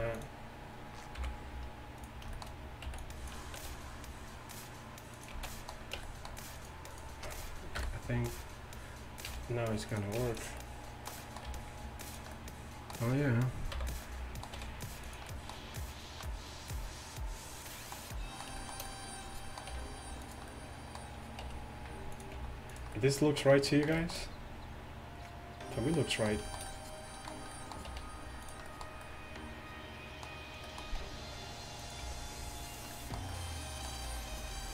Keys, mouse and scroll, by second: 1.2 ., 2.4 middle click, 2.9 b, 3.6 s, 6.0 Tab, 6.0 b, 6.0 s, 6.0 z, 7.8 KP_3, 9.3 r, 10.2 g, 11.5 g, 13.8 ,, 15.1 r, 19.8 g, 21.5 r, 22.4 g, 27.9 r, 28.5-29.3 drag, 31.0 r, 32.1 g.